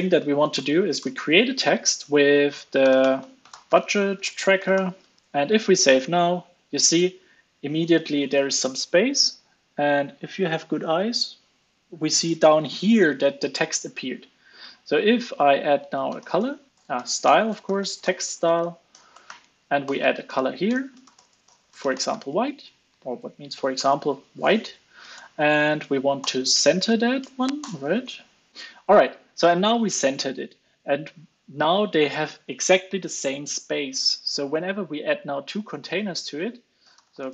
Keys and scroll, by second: 5.2 ctrl+space, 5.4 super+s, 16.7 ctrl+space, 22.6 super+s, 23.1 super+s, 23.7 alt+super+l, 23.9 super+s, 26.2 alt+Return, 27.8 super+s.